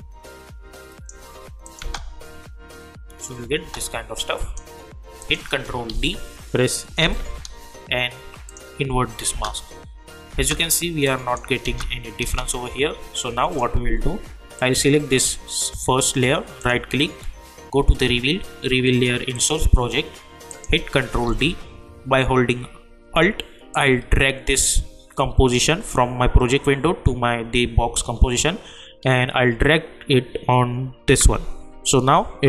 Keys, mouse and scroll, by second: 1.8 space, 4.1 click, 5.9 ctrl+d, 7.0 m, 8.5 click, 9.3 space, 11.0 click, 11.6 space, 13.1-14.6 drag, 16.6 right click, 19.3 click, 21.2 ctrl+d, 23.7-32.4 alt+drag.